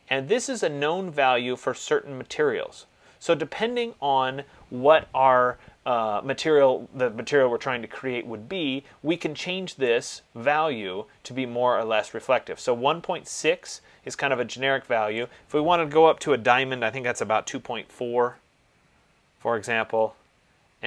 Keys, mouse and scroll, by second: 10.2 click, 15.5 click, 17.6-18.0 typing, 20.0 Tab.